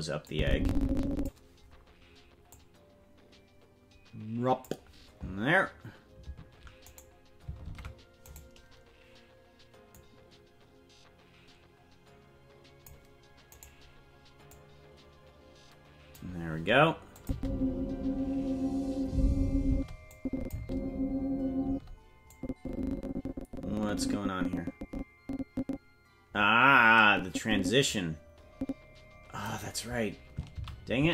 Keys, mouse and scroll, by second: 0.3-1.3 drag, 2.5-4.7 drag, 6.9 right click, 7.7 ctrl+Tab, 8.3-9.9 right drag, 9.9-12.9 drag, 13.6 right click, 14.5-16.2 drag, 17.2-18.4 drag, 17.3 space, 19.7 space, 20.1-21.3 drag, 20.5 space, 21.7 space, 22.3-29.5 drag, 30.9 ctrl+z.